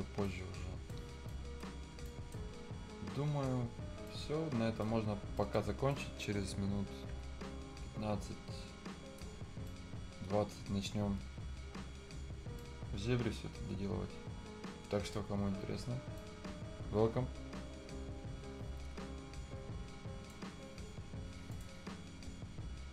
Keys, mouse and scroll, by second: 0.0 scroll up 1, 0.3 right click, 1.0 scroll up 1, 1.3 right click, 1.8 scroll down 1, 2.1 right click, 2.5-3.3 scroll down 1, 3.3-3.8 scroll up 1, 4.1 right click, 4.9 scroll down 1, 5.1-5.4 scroll up 1, 5.4 right click, 5.7 scroll up 1, 5.9-9.3 right drag, 9.3 scroll down 1, 9.5 scroll up 1, 9.7 right click, 10.6 scroll down 1, 10.9-11.3 scroll up 1, 12.4 scroll down 1, 12.6-16.0 right drag, 16.0 scroll up 1, 16.2-21.5 right drag, 21.5 click.